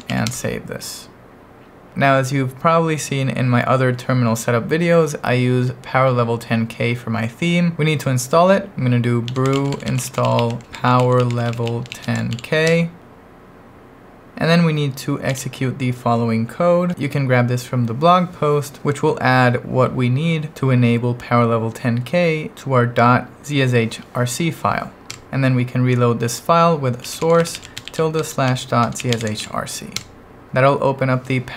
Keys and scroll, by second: 0.0-0.6 typing, 8.7-12.8 typing, 15.3 super+v, 25.1 Return, 26.8-29.9 typing, 30.0 Return.